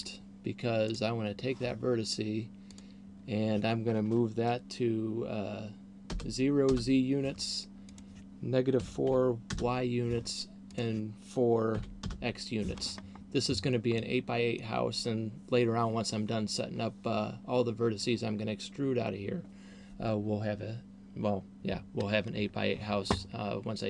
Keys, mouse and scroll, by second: 0.8 right click, 2.8 click, 7.8 click, 10.8 click, 13.0 scroll down 1, 14.0 middle click.